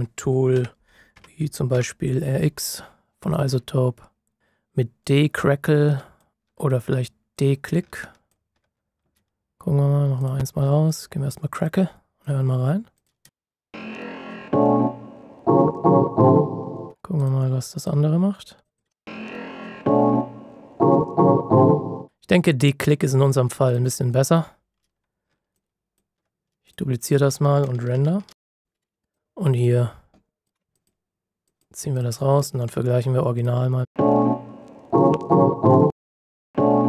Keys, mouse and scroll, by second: 0.5-1.7 typing, 3.6-4.4 typing, 5.3 click, 13.2 space, 16.8 space, 17.1 click, 18.8 space, 22.1 space, 23.6 click, 25.5 alt+click, 28.2 ctrl+shift+b, 29.1 click, 30.7 ctrl+click, 33.3 click, 33.8 space, 35.9 click, 36.0 space.